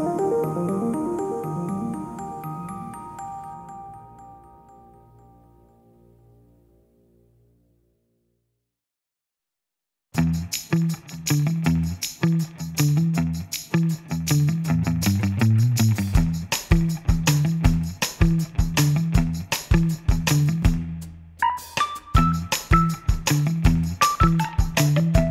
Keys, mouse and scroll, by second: 1.3 click, 1.7-2.2 scroll up 2, 2.2 click, 3.3 click, 3.9-4.3 scroll up 1, 4.3 ctrl+s, 4.6 middle click, 5.1 scroll up 2, 5.3 middle click, 5.9-6.5 scroll down 2, 6.5 ctrl+r, 8.6 click, 9.0-10.1 middle drag, 10.1 ctrl+r, 12.7 click, 13.3 middle click, 14.0 ctrl+r, 16.9 click, 17.4 ctrl+r, 19.2 click, 19.6-19.9 scroll down 3, 19.9-22.3 middle drag, 22.3-22.8 scroll up 1, 22.8 ctrl+s, 23.4 ctrl+s, 24.3 ctrl+s, 24.7 ctrl+s, 25.0 ctrl+s, 25.1 ctrl+s.